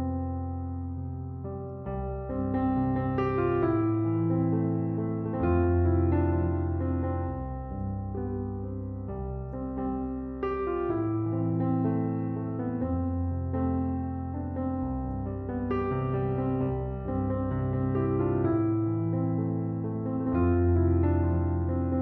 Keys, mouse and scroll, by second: 0.5 right click, 21.6 ., 21.9 7.